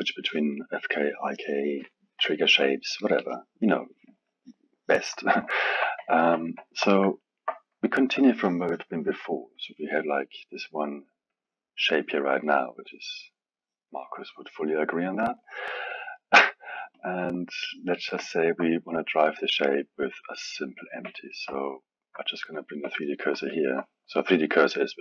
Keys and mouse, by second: 5.5-9.5 alt+middle drag, 9.5 click, 11.3-16.0 drag, 16.0-16.9 alt+middle drag, 16.9-18.2 drag, 18.2-21.3 alt+middle drag, 22.5 shift+right click, 23.4-25.0 alt+middle drag.